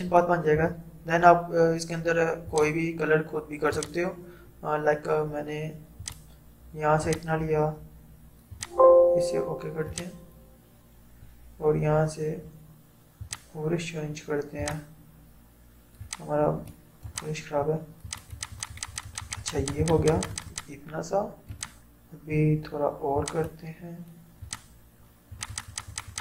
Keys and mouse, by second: 0.6 ctrl+0, 2.5 click, 13.3 click.